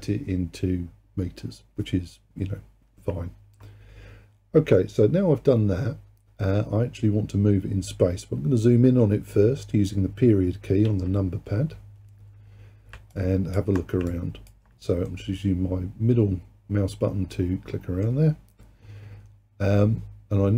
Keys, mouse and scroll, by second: 10.9 KP_Decimal, 12.7-13.2 scroll down 2, 13.2 alt+click, 14.1 alt+click, 15.1-18.1 middle drag.